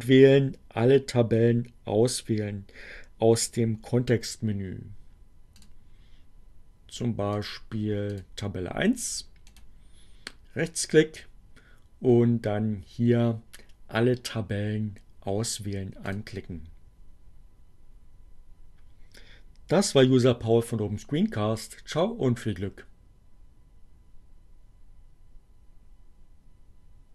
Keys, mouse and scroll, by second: 5.3 click, 7.3 click, 8.1 click, 8.6 right click, 15.2 click.